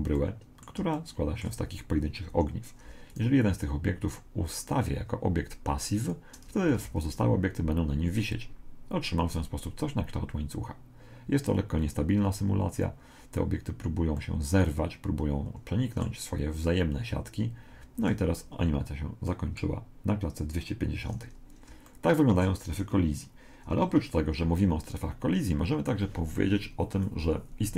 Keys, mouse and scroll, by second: 0.7 middle click, 1.1-2.5 middle drag, 2.3 Escape, 3.1 right click, 6.0 click, 6.8 alt+a, 14.2-16.0 middle drag, 19.3-21.1 middle drag, 20.5 Escape, 21.9-23.6 middle drag.